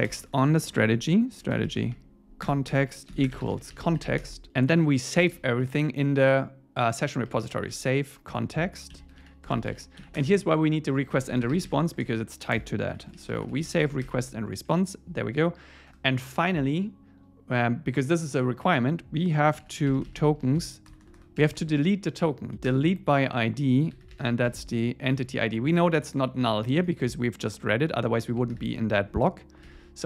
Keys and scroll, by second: 2.5 Return, 4.2 Escape, 4.5 Return, 8.3 Return, 14.1 ⟲, 14.6 Right, 15.9 Return, 22.7 Return, 25.1 Tab.